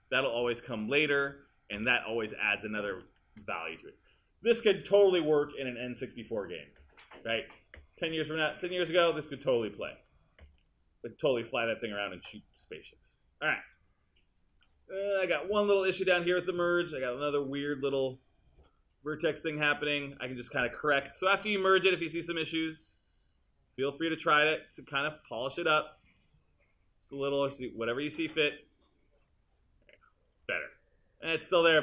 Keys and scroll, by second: 21.1 w.